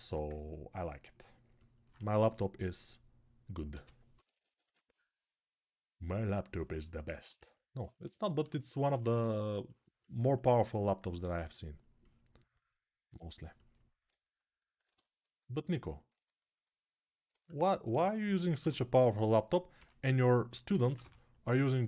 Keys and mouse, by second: 2.0 f, 2.5-4.8 middle drag, 3.5 g, 3.9 [, 4.1 [, 4.8-6.3 right drag, 4.8 [, 8.2 3, 11.1-15.4 drag, 15.4-20.6 alt+right drag, 17.1 alt+q, 18.4 h, 19.5 g, 20.5 ], 20.6-21.8 drag, 20.6 ].